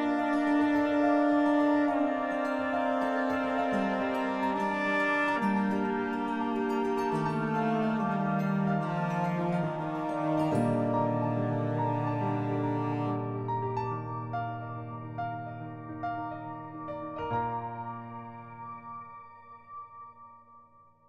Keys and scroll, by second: 1.8 z, 2.0 z, 5.7 z, 18.5 l.